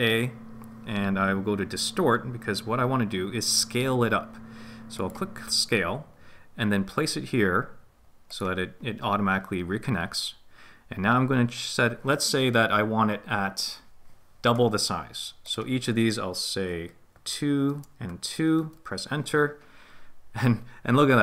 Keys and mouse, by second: 15.5-18.6 drag.